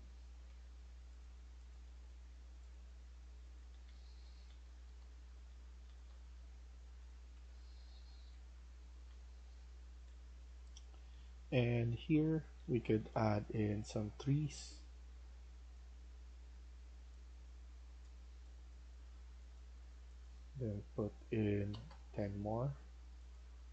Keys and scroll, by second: 0.0-0.4 typing, 1.6-7.5 typing, 4.5 Escape, 4.8 Escape, 8.5 Escape, 8.7-13.4 typing, 21.3-22.1 typing, 23.3-23.7 typing.